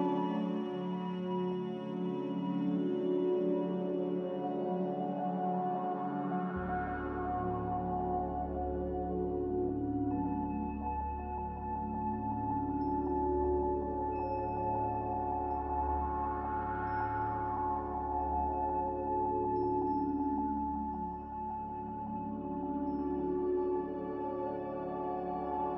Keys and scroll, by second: 6.2 5, 6.4-8.4 Return, 9.8 Return, 25.5 a.